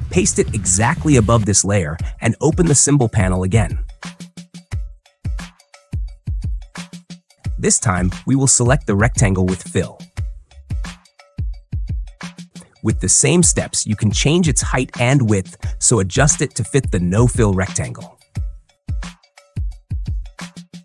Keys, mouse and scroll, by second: 0.5 ctrl+v, 2.3 click, 3.4-4.4 drag, 5.0 super+;, 6.9 click, 11.7 click, 13.3 click, 19.8 click.